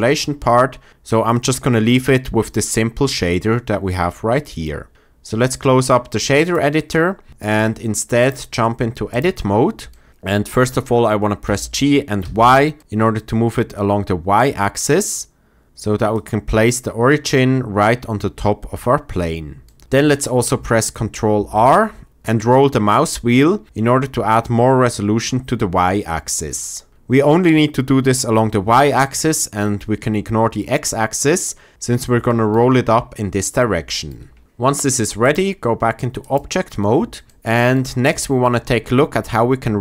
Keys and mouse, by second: 8.3-9.2 drag, 11.4 g, 12.2 y, 12.7 click, 13.1 click, 16.1 click, 21.3 ctrl+r, 35.2-36.3 drag.